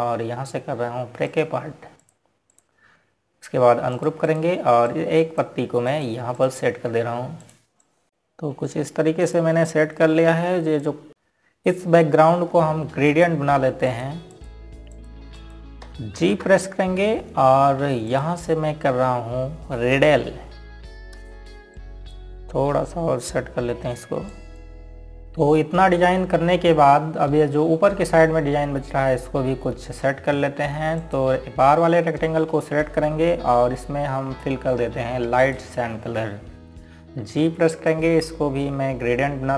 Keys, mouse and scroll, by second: 2.7 click, 8.7 scroll down 1, 10.2-10.5 scroll up 1, 10.9 click, 12.4 scroll up 1, 14.8 click, 15.6 click, 17.9 ctrl+z, 18.3-19.1 typing, 19.8 click, 23.4 click, 25.2 click, 28.2 scroll up 1, 34.7 click, 37.1 click, 38.9 g.